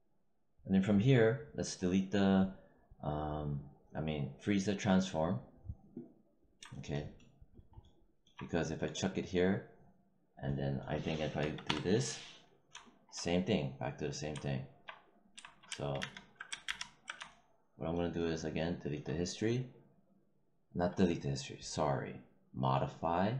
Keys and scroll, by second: 11.3 0, 11.6 Return, 15.9 ctrl+z.